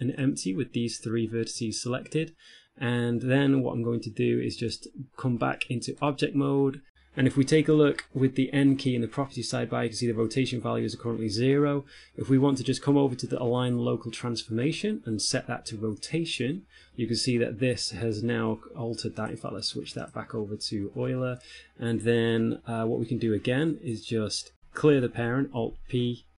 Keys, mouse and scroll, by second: 0.4 click, 0.4-1.0 scroll up 3, 4.8 Tab, 6.2 right click, 7.0 n, 9.4-11.2 scroll up 3, 9.4 n, 11.2 scroll up 5, 16.2 click, 19.4 click, 25.5 alt+p.